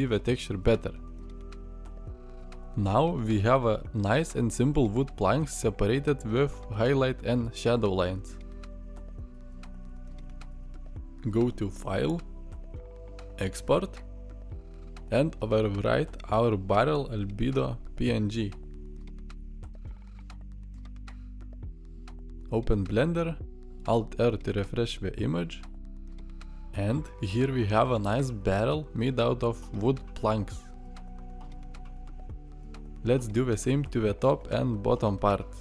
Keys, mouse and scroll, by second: 26.3 alt+r, 30.7-31.2 middle drag, 31.5-32.9 middle drag.